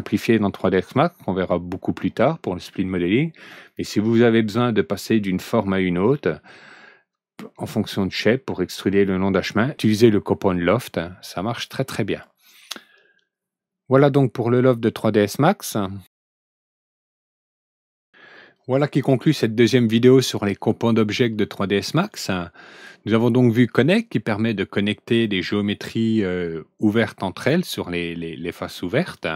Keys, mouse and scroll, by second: 15.7 click.